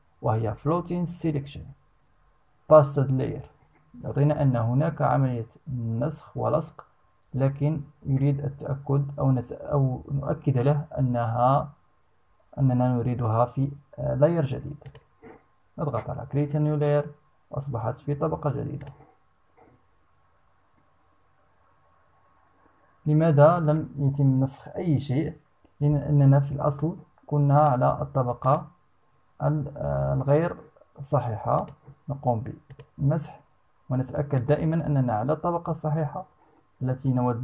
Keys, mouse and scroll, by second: 14.4 click, 18.3 click, 27.1 click, 28.0 click, 31.1 click, 32.2 click, 33.9 click.